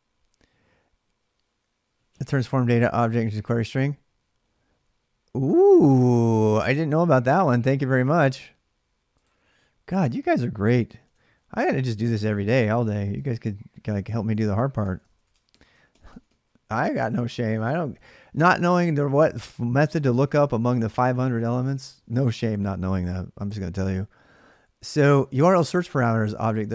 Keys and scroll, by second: 10.8 alt+Tab, 14.2 ctrl+[, 14.6-16.0 typing, 20.2-21.4 typing, 24.2 ctrl+[, 24.3 typing.